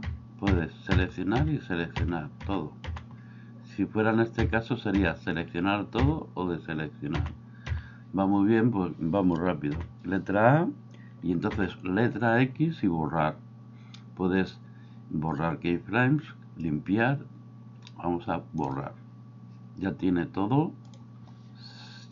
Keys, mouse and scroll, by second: 0.0-2.9 typing, 4.4 a, 5.0 a, 6.0 a, 7.2 a, 7.7 a, 9.7 a, 11.5 x.